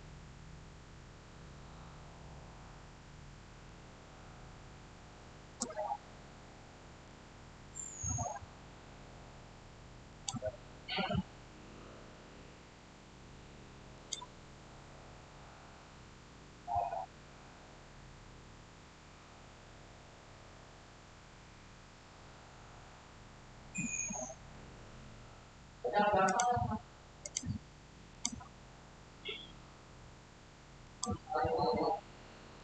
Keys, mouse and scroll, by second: 5.9-9.6 shift+middle drag, 10.0 click, 13.8 click, 26.2 click, 28.6 scroll up 1, 30.7 click.